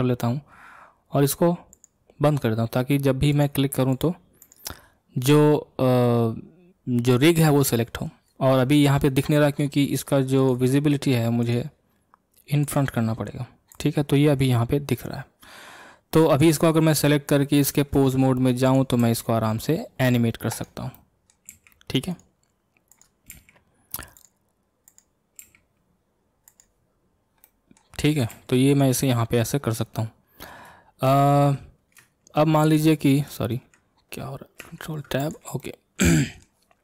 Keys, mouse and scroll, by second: 1.7 click, 3.3 click, 3.9 click, 4.4 click, 10.4 click, 11.4 click, 12.6 click, 13.7 click, 16.4 click, 17.9 ctrl+Tab, 18.6 click, 19.0 r, 21.0-21.5 middle drag, 21.5 r, 22.9 click, 23.3 r, 24.9 click, 25.4 r, 27.4-28.1 middle drag, 28.1 click, 28.3 r, 29.1-31.0 middle drag, 31.0 shift+Tab, 32.4 shift+Tab, 34.6 ctrl+Tab, 35.2 click, 35.6-36.8 middle drag.